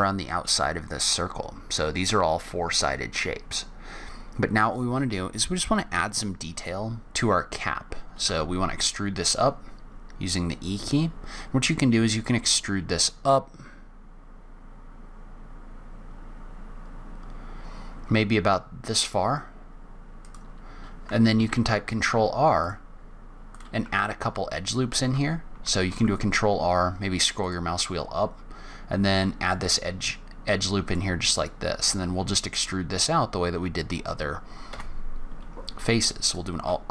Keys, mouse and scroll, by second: 1.1-1.6 scroll up 2, 4.0-4.6 scroll down 2, 4.5 scroll up 1, 7.0-8.2 scroll down 1, 8.2 e, 21.3 ctrl+r, 25.0 ctrl+z, 25.9 ctrl+r, 31.3-31.9 scroll up 2, 31.9 scroll down 1, 34.6 scroll down 1, 34.7 3, 35.9 alt+space, 36.2 alt+click.